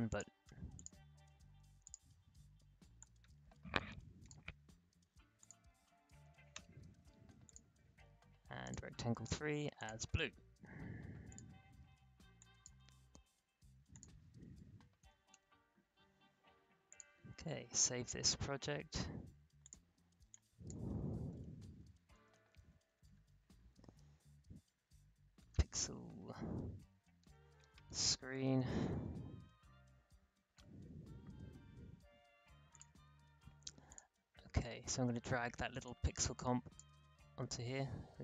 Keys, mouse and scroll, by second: 0.0-5.4 drag, 6.2 0, 6.5 Return, 7.4 click, 15.0 0, 15.3 Return, 16.8 click, 17.7 ctrl+shift+s, 19.6 click, 21.0-22.8 typing, 23.9 x, 25.1-29.4 typing, 30.7 Return, 32.7-37.5 drag, 37.5 alt+scroll up 1, 38.0-38.2 alt+scroll down 1.